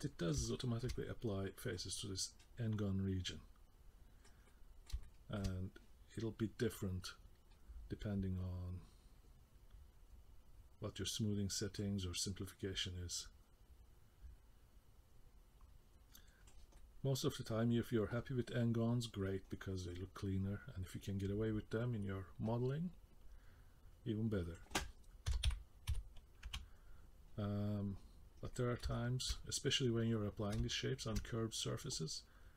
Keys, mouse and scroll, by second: 0.1 middle click, 0.5 shift+middle click, 0.9 middle click, 2.4 middle click, 4.5 middle click, 5.0 shift+middle click, 5.5-7.0 scroll down 1, 7.0 click, 12.1 click, 16.7 middle click, 19.5 middle click, 24.4 click, 28.2 scroll down 2, 28.5 middle click, 28.9 shift+middle click, 29.3 middle click, 29.3-30.1 scroll up 4, 30.1 middle click, 30.7 shift+middle click, 31.2-32.5 scroll down 2.